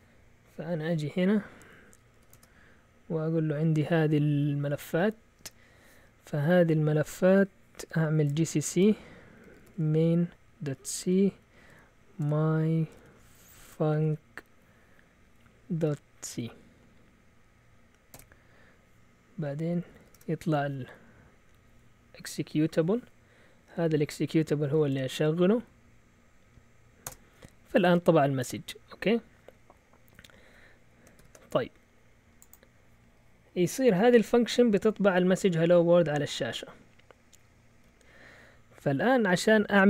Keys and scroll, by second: 2.0-2.7 typing, 8.0-14.5 typing, 15.9-16.3 typing, 18.1 typing, 19.5-20.2 typing, 24.3-25.2 typing, 27.0 Return, 31.2 ctrl+l, 36.3-36.8 typing.